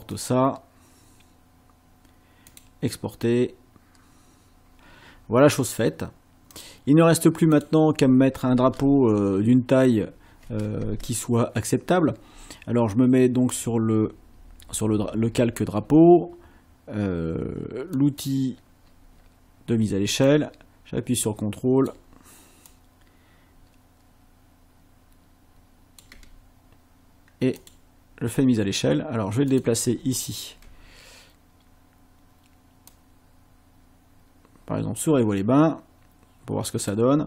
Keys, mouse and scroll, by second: 0.1 click, 2.5 click, 6.5 click, 7.5 click, 9.3 ctrl+scroll up 2, 9.8 ctrl+scroll down 2, 13.6 click, 18.0 click, 20.3-22.1 ctrl+drag, 22.7-26.2 ctrl+drag, 27.6 click, 29.5 click, 30.1 ctrl+scroll up 2, 32.9-37.1 drag.